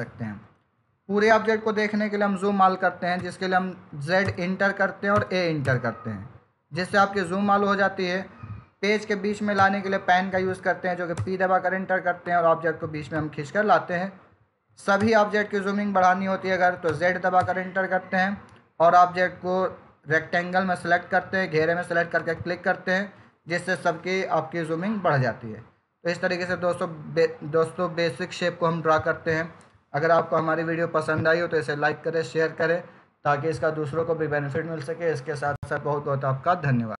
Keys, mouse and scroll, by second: 3.1 z, 4.1 Return, 5.0 a, 5.5 Return, 9.5 p, 11.1 Return, 12.2 click, 14.9 Return, 16.8 z, 17.3 Return, 18.8 click, 22.1 click.